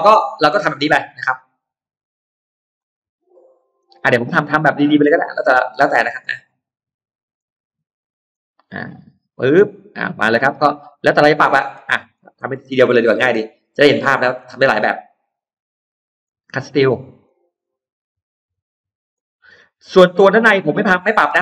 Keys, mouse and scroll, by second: 0.0-0.3 scroll down 2, 0.4 middle click, 0.6-0.9 scroll down 2, 2.6 click, 3.6 click, 4.0 middle click, 4.8-5.1 scroll up 2, 5.6 click, 6.1 scroll down 2, 6.6-6.9 scroll up 2, 7.2 click, 8.2 click, 8.5-8.8 scroll down 2, 9.2-11.4 middle drag, 11.5-12.3 scroll down 4, 11.8 middle click, 12.4-13.2 scroll up 4, 13.4-13.8 scroll down 1, 16.1 click, 17.1 click, 18.3 click, 19.0 click, 19.3 scroll up 1, 19.7 click, 20.6 click, 21.0 scroll up 1.